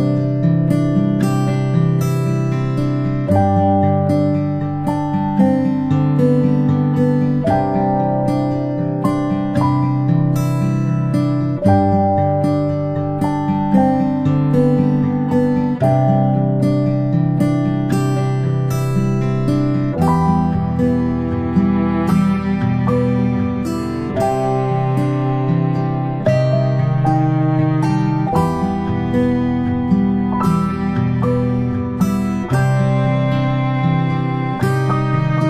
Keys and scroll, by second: 6.6 ctrl+c, 6.7 ctrl+v, 13.4-14.4 typing, 19.3 ctrl+p, 29.1 ctrl+z, 29.3 ctrl+z, 29.9 ctrl+z.